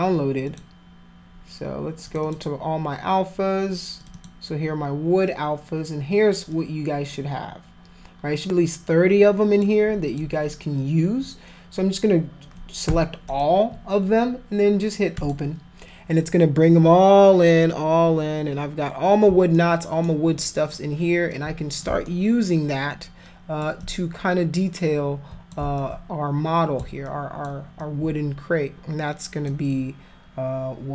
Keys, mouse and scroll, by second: 0.4 click, 2.0 click, 2.2 click, 4.0 click, 4.1 click, 6.5-9.6 drag, 10.1 click, 13.3 shift+click, 15.2 click, 19.6 alt+middle click, 20.4 alt+middle click, 21.4 alt+click, 22.1 alt+middle click, 22.8 alt+click, 23.8-25.5 drag, 25.8-26.8 alt+drag, 27.1 alt+click, 27.8-29.5 alt+drag.